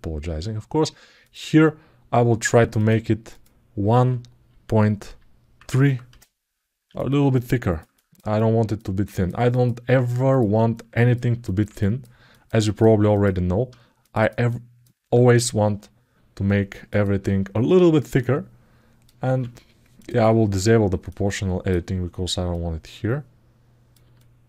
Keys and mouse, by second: 6.7 alt+middle click, 7.7 ctrl+alt+middle click, 8.1 alt+middle click, 8.8 ctrl+alt+middle click, 9.3 alt+middle click, 10.5 ctrl+alt+middle click, 11.2 alt+shift+middle click, 11.5 ctrl+alt+middle click, 12.1 ctrl+alt+middle click, 12.3 ctrl+alt+middle click, 13.8 click, 14.2 alt+middle click, 16.7 click, 18.0 click, 19.7 click, 20.9 click, 22.3-23.7 drag, 23.9-24.4 alt+middle drag.